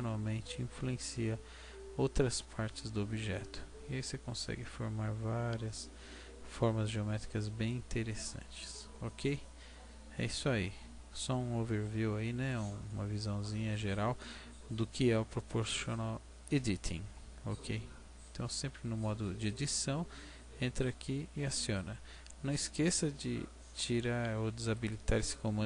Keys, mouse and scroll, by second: 2.2 Tab, 2.8 middle click, 6.8 middle click, 7.6 middle click, 10.0-10.4 scroll down 2, 11.2-11.6 scroll down 3, 11.6 middle click, 13.7-15.3 scroll up 3, 17.0 Tab, 24.8 click.